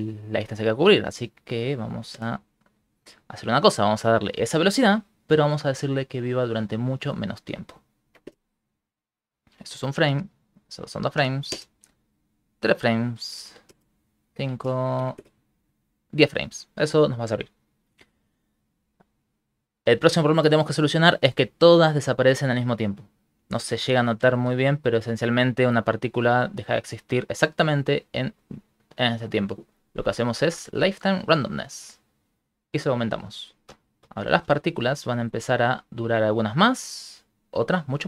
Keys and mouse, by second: 1.4 click, 6.9 click, 9.7 click, 10.8 click, 12.6 click, 14.2 click, 19.2 ctrl+middle click, 23.6 shift+space, 24.4 Right, 24.8 Right, 25.2 Right, 25.4 Right, 25.7 Right, 31.6 click, 33.7 Right, 34.0 Right, 34.2 Right, 34.4-35.4 Right, 35.5 Right, 35.7 Right.